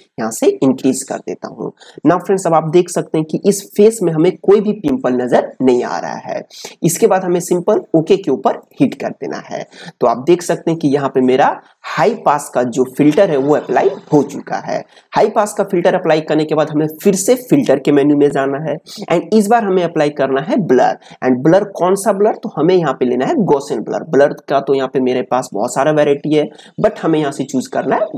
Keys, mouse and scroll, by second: 17.6 click.